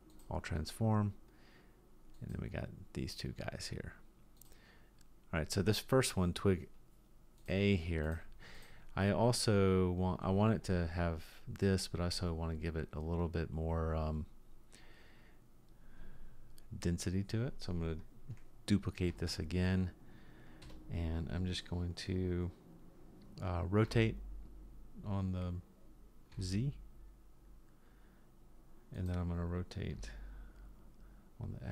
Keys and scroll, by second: 19.1 shift+d, 23.9 r, 30.0 r.